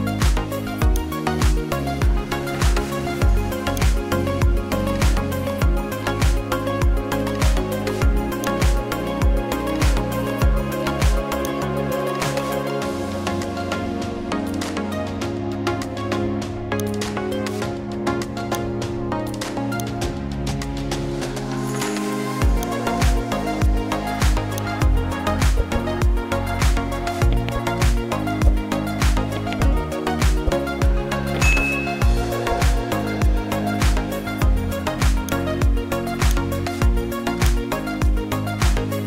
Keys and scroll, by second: 12.7 space.